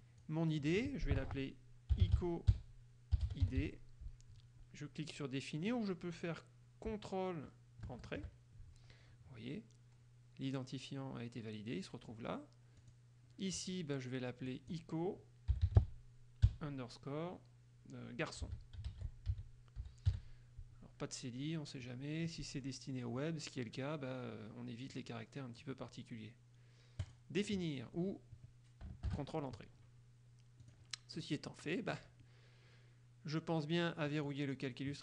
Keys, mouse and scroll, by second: 1.9-3.6 typing, 8.0 ctrl+Return, 13.0 click, 14.7 click, 15.7 i, 16.0 o, 18.4-20.8 typing, 25.1 click, 27.2 click, 29.2 ctrl+Return, 30.8 click, 31.4 click, 31.8 middle click, 34.2 click.